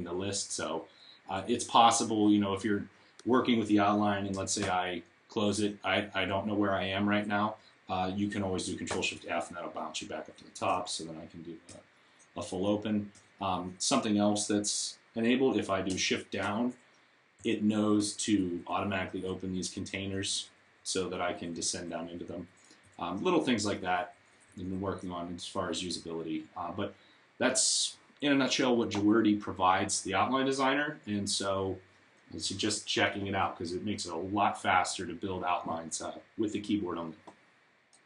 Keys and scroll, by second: 4.4 ctrl+shift+;, 11.5 ', 13.0 ;, 23.4 Down, 23.7 Down, 23.9 Down, 24.5 Down.